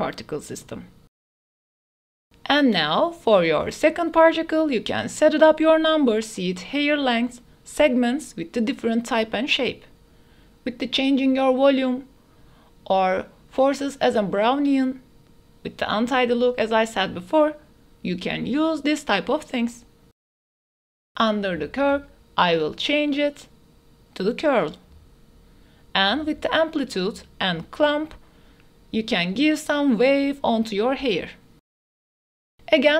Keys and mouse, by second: 1.9 click, 2.7-5.2 drag, 5.5 click, 6.4 click, 7.7-10.4 drag, 10.6 click, 11.5 click, 12.2-15.3 drag, 15.6 click, 16.4 click, 17.4 g, 17.6 x, 18.6 ctrl+s, 21.8-22.7 drag, 23.0 ctrl+z, 23.3-23.8 drag, 25.2-27.1 drag, 27.7 click, 29.0 click, 29.4 click, 31.6 shift+d, 32.0 x.